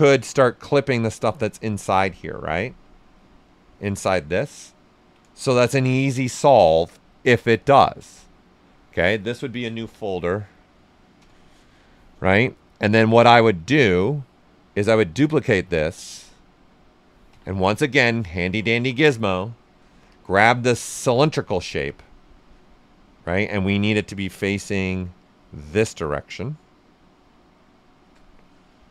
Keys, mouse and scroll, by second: 4.4-7.2 ctrl+right drag, 7.2-9.7 drag, 9.7 ctrl+d, 11.1 Return, 13.5-14.9 drag, 14.9 click, 17.2 w, 18.3 alt+click, 19.1 ctrl+right click, 20.0 click, 23.1 w, 23.3-25.1 right drag, 25.1-28.2 shift+drag, 28.2-28.9 right drag.